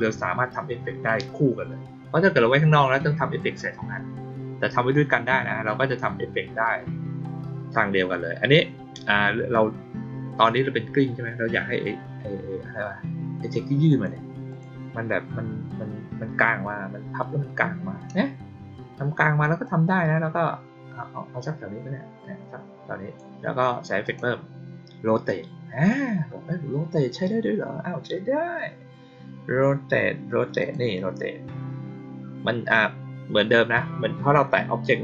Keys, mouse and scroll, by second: 13.8 click, 14.4 click, 19.6-23.1 drag, 24.0 click, 30.5 click.